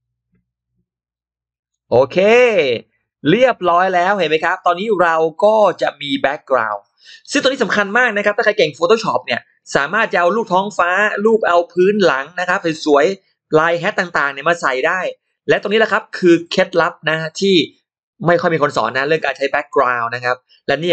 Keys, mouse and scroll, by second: 2.3 click, 2.8-3.6 scroll down 2, 3.6 middle click, 4.2-4.7 scroll up 1, 4.7 scroll down 1, 4.8 click, 5.0 scroll up 1, 5.3 middle click, 5.6 click, 5.9-6.2 scroll up 1.